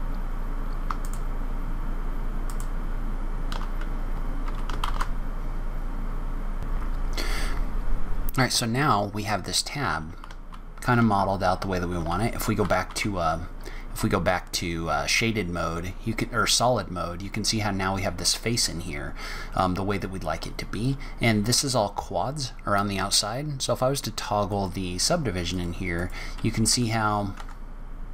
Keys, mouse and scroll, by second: 0.0-6.2 typing, 0.6 click, 0.8 click, 1.0 click, 1.4 click, 1.7 click, 2.0 click, 2.1 click, 2.4 click, 2.4 click, 2.7 click, 2.9 click, 3.0 click, 3.4 click, 3.7 click, 3.8 click, 4.1 click, 4.3 click, 4.5 click, 4.7 scroll up 4, 5.1 click, 5.4 click, 5.6 click, 5.8 click, 5.9 click, 6.2 click, 6.4 scroll down 2, 7.1 scroll down 1, 10.2 shift+z, 12.0 shift+z, 19.5-19.9 scroll down 2, 19.9 scroll up 1, 20.7 scroll up 1, 24.5 click, 25.4 click, 26.6 Tab, 26.6 click, 27.4 Tab.